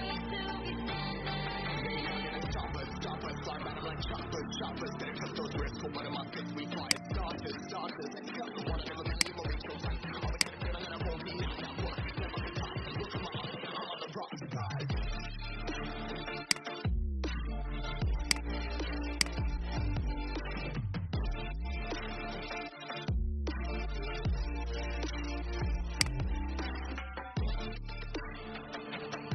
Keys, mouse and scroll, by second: 1.9-3.5 typing, 6.0 ctrl+z, 6.7 click, 9.1 click, 11.6 Down, 11.8 Down, 11.9 Down, 12.1 Down, 14.9-16.3 alt+scroll up 1, 16.3-27.0 drag, 27.6 ctrl+x, 29.1 alt+scroll down 1.